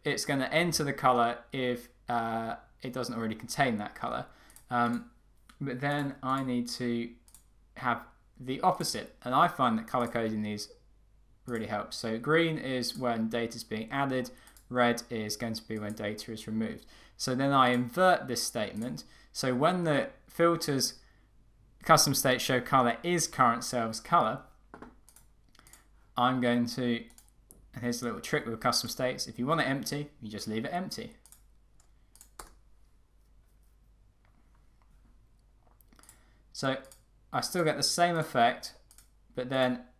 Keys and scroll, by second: 32.5 Return.